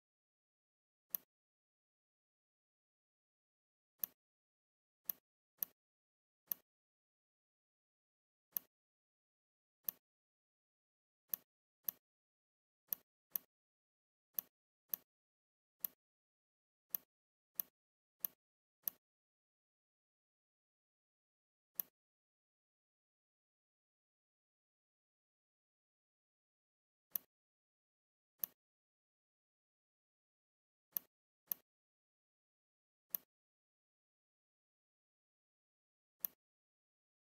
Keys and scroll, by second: 24.6 ctrl+c, 25.1 ctrl+f.